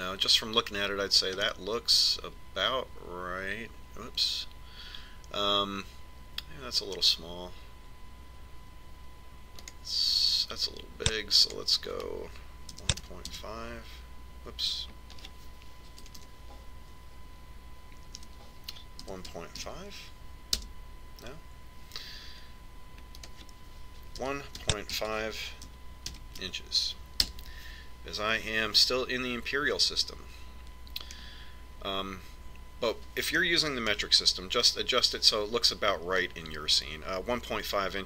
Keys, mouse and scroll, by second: 2.7-4.6 middle drag, 10.9-14.6 drag, 17.6 BackSpace, 24.6 click, 32.6-34.6 middle drag, 35.4 KP_1.